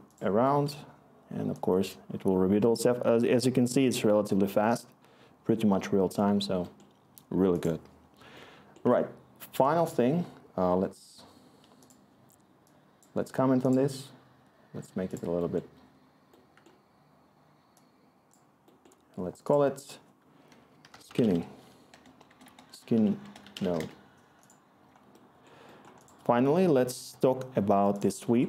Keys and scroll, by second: 13.7 c, 20.4-24.2 typing, 26.7-28.1 typing.